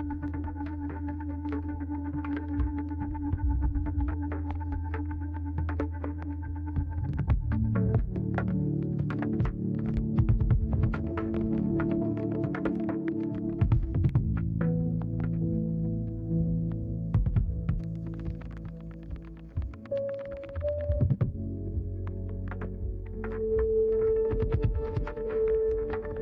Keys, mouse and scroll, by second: 1.7 right click, 3.2 click, 4.0 middle click, 5.1 click, 5.6 click, 6.6 click, 7.3-9.9 right drag, 12.8 middle click, 14.5 middle click.